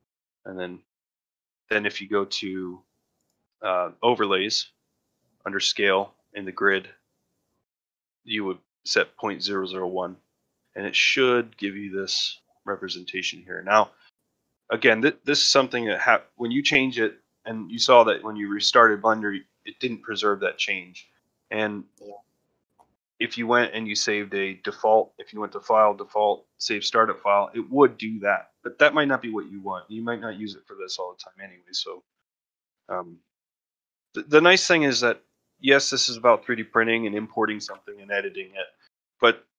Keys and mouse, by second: 2.4-10.1 drag, 27.2 click, 33.8 middle drag, 34.2 shift+middle drag, 35.0-35.3 shift+middle drag.